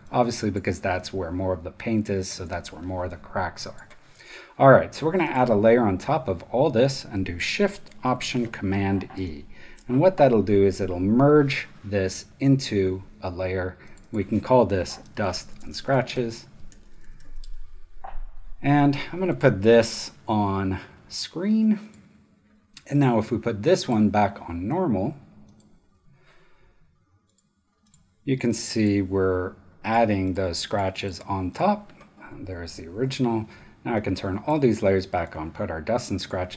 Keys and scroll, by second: 1.7 super+space, 9.1 alt+shift+super+e, 14.4-17.7 typing.